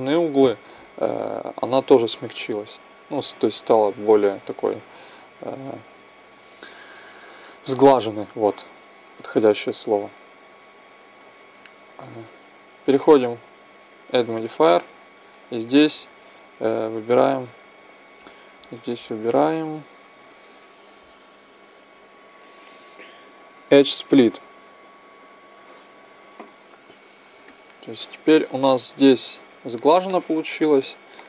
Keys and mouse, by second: 2.9 t, 9.3-16.6 drag, 27.4-29.2 middle drag, 30.0-31.2 middle drag.